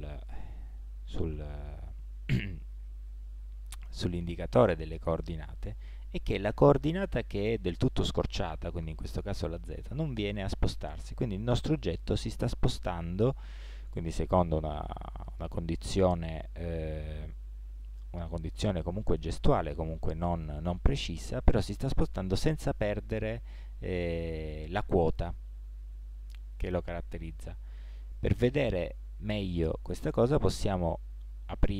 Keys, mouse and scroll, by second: 30.1-31.1 drag.